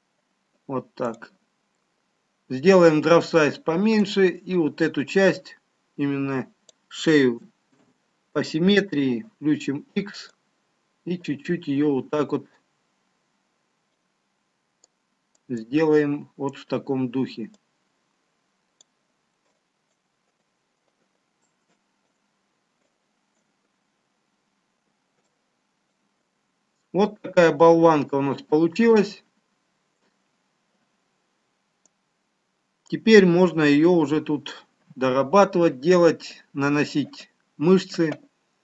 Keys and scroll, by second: 11.6 ctrl+z, 12.9 x.